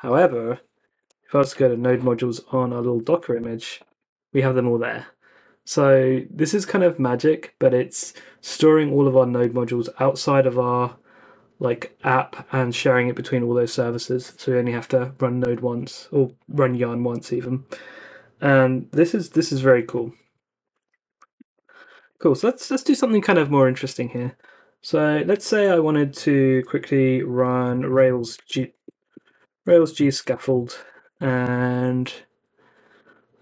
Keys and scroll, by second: 0.6-3.6 typing, 2.5 Return, 20.3-22.4 typing, 27.4-31.5 typing.